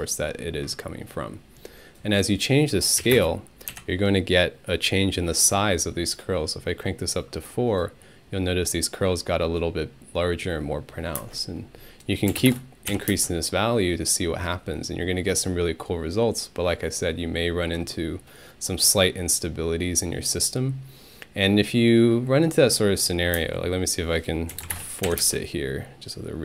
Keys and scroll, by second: 3.0 4, 3.1 Return, 3.7 Home, 11.2-13.1 typing, 12.9 Home, 23.4-25.2 typing.